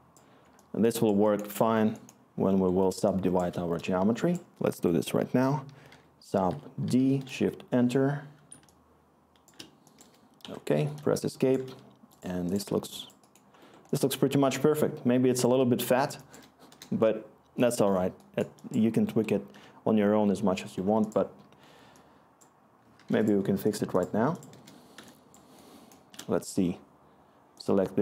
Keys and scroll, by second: 4.7 Tab, 5.6-7.3 typing, 10.4-14.9 Escape, 14.9-16.1 scroll, 17.5 Return, 18.4 scroll, 24.5-26.1 Return.